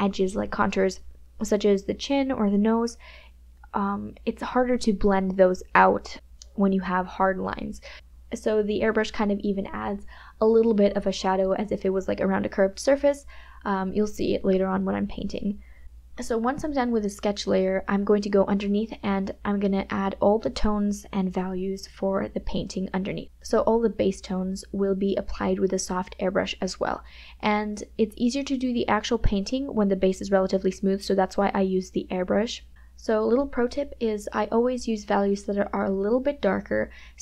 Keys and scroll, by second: 6.8 KP_Add, 16.1 space, 28.6 KP_Add.